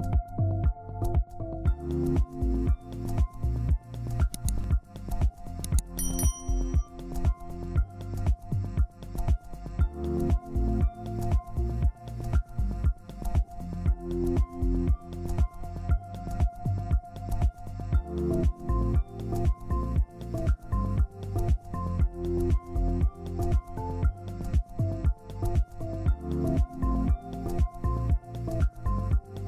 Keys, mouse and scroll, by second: 1.5 double click, 3.3 ctrl+z, 4.7 ctrl+space, 5.1 scroll down 1, 6.9 Delete, 7.6 Delete, 8.0 scroll up 1, 8.9 double click, 10.9 ctrl+z, 15.5 ctrl+space, 15.9 typing, 17.2 ctrl+space, 19.3 double click, 20.2 Down, 20.4 Down, 20.6 Down, 21.6 Right, 21.8 Right, 21.9 Right, 22.1 Right, 23.1 double click.